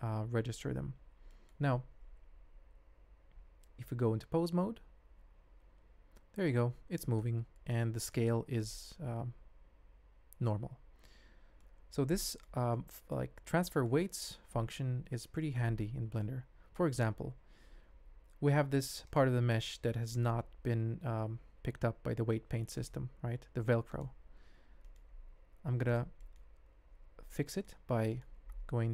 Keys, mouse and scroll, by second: 3.8 ctrl+Tab, 4.8 g, 8.2 ctrl+Tab, 10.9 n, 11.6-11.9 ctrl+drag, 12.1 ctrl+click, 12.7-13.1 drag, 13.6 ctrl+click, 15.3 ctrl+click, 16.2-16.7 shift+drag, 18.0 Tab, 18.5 Tab, 19.4 ctrl+Tab, 20.1 click, 20.6 ctrl+Tab, 21.5 g, 23.4 g, 24.8 shift+click, 25.6 ctrl+Tab, 26.2 shift+click, 26.7 Tab, 27.3 middle click, 27.8 3, 28.1 alt+click.